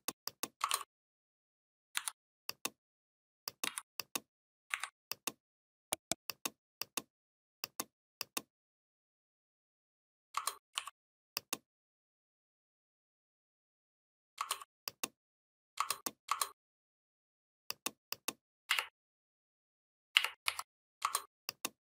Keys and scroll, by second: 1.8 c, 4.5 Delete, 18.5 Up, 20.3 Down.